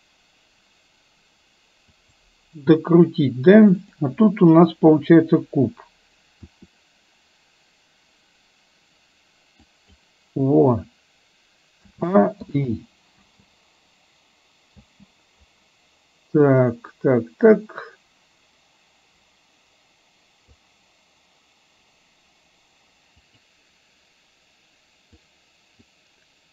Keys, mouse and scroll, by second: 4.1-5.1 drag, 7.3 r, 12.6 i, 13.3 space, 17.2-20.8 drag, 23.2 click, 25.2-25.8 drag.